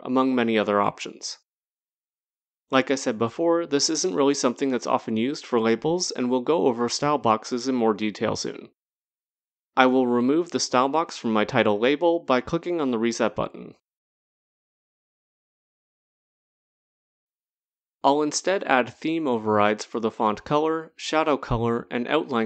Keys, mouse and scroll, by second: 0.1-1.1 scroll, 1.1 click, 1.1 scroll, 4.0 click, 6.8 click, 10.3 click, 12.5 click, 14.6 click, 16.2 click.